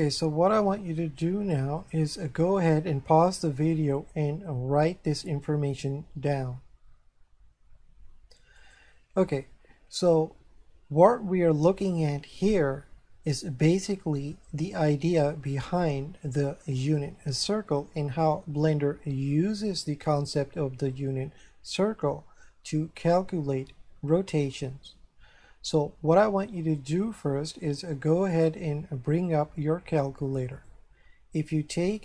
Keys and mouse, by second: 1.8 click, 8.6 click, 29.2 click, 30.6 click.